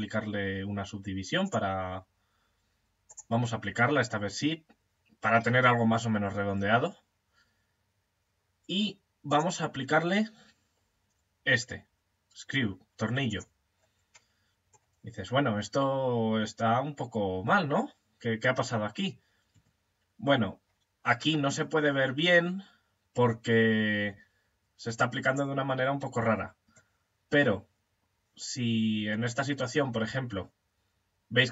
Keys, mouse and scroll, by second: 2.5 click, 4.4-5.6 middle drag, 5.7-8.7 middle drag, 8.7 click, 13.8 middle click, 16.2 middle click, 19.0 Tab, 21.1 middle click, 22.5 middle click.